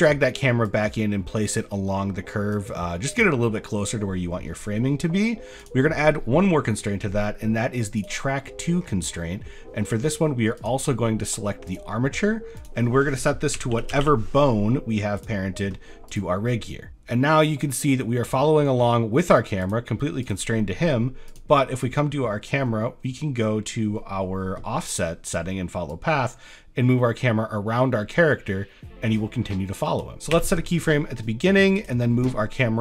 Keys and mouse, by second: 0.1 click, 0.7 click, 3.1 middle click, 5.7-8.1 drag, 8.5 middle click, 9.2 middle click, 9.6 shift+click, 10.6 click, 12.7-15.3 drag, 16.1 click, 19.6 click, 20.3 click, 21.3 click, 25.9-30.1 drag, 31.8 click.